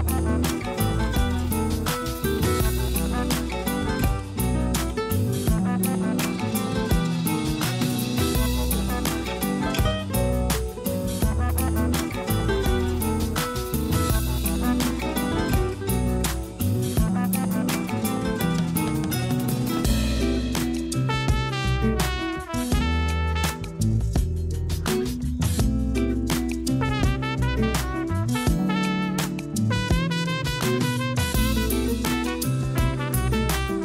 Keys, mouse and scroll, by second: 1.7-2.2 scroll down 4, 2.2-2.7 scroll up 2, 2.7 g, 4.4 a, 4.6 a, 5.5-7.0 middle drag, 7.0 a, 7.4 KP_1, 7.7 KP_3, 8.6 s, 10.9 s, 12.8 a, 13.0 a, 13.5-15.4 middle drag, 15.4 3, 15.5 click, 16.1-17.2 middle drag, 17.2 shift+click, 17.6 middle click, 18.3-19.0 scroll up 1, 19.0-19.6 scroll down 2, 19.6 i, 22.1 alt+e, 26.1 s, 28.0 middle click, 28.7-29.2 scroll up 1, 29.2 e, 30.9 alt+s, 33.2 a, 33.4 a, 33.5 scroll down 2, 33.7 Tab.